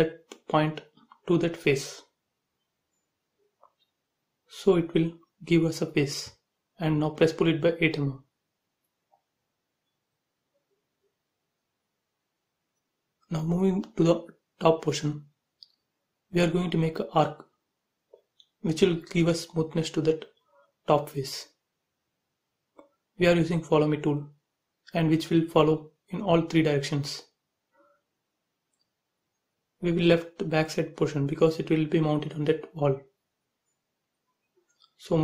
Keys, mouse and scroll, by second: 0.5 scroll down 1, 1.6 Right, 2.4-4.2 middle drag, 4.2 click, 4.4 space, 4.7 middle click, 5.5 click, 5.9 middle click, 6.4-7.3 scroll down 1, 7.3 p, 7.6 click, 8.2 click, 8.5 space, 8.7 middle click, 9.2-9.7 scroll down 1, 9.7 middle click, 10.2 click, 11.1 scroll up 1, 11.4 middle click, 12.1 scroll up 1, 12.4 shift+middle click, 13.4 click, 13.8-14.1 scroll up 1, 14.6 shift+x, 14.8-15.4 scroll up 1, 16.7 a, 17.3 click, 18.9 space, 20.1 click, 25.3 space, 25.8 click, 28.6 Delete, 29.2 scroll down 1, 30.7 click, 31.1 middle click, 32.2 click, 33.2 m, 33.4 click, 34.5 Left, 35.1-35.2 typing.